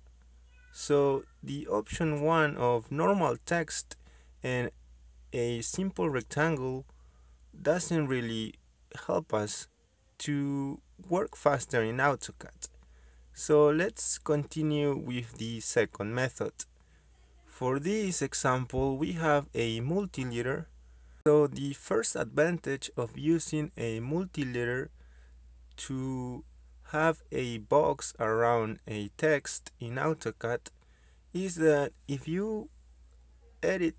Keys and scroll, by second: 13.7 m, 13.8 space, 15.2-18.4 typing, 18.6 Return, 27.0 m, 27.1 space.